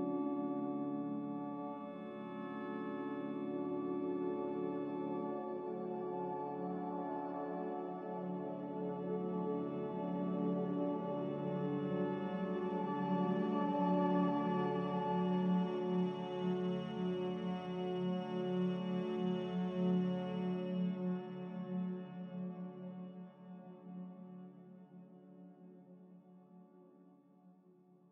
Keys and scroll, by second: 5.2-7.5 typing, 8.6-10.4 typing, 11.5-14.3 typing, 22.9 m.